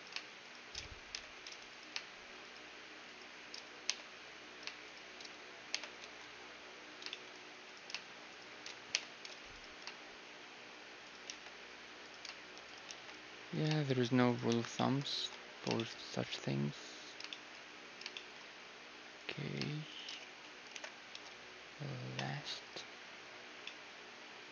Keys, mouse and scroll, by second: 1.1 j, 3.9 j, 4.9-6.9 right drag, 5.7 j, 6.0 a, 6.2-7.7 middle drag, 7.7-8.9 drag, 7.7-15.5 right drag, 8.9 j, 11.2 shift+r, 12.9 shift+r, 14.5 shift+r, 14.7 click, 15.2 a, 15.4-21.7 middle drag, 15.5-17.3 drag, 19.2-20.3 drag, 20.7 alt+m, 22.7 a, 23.7-24.5 middle drag.